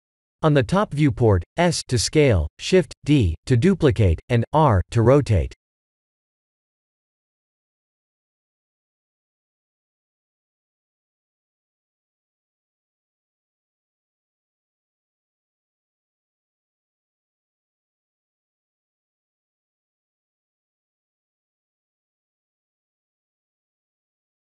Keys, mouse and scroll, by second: 1.6 KP_7, 3.0 shift+d, 4.3 ctrl+z, 5.2 shift+d, 9.5 s, 10.6 shift+d, 13.5 s, 15.6 shift+d, 18.4 s, 19.3 middle click, 20.3 click, 22.0 click, 22.7 click, 23.2 middle click, 23.2 scroll down 1, 24.3 scroll up 4.